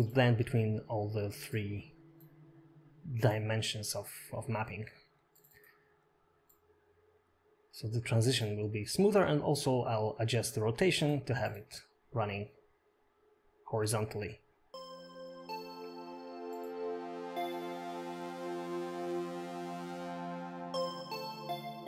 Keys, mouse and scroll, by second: 1.4 click, 3.7 click, 3.9 click, 5.7 click, 6.9 click, 7.5-7.9 scroll down 2, 7.7 middle click, 7.9 scroll up 3, 8.2 middle click, 8.9 scroll down 4, 9.3 middle click, 9.7 shift+middle click, 9.9 click, 11.6 middle click, 13.1 click, 14.9 click.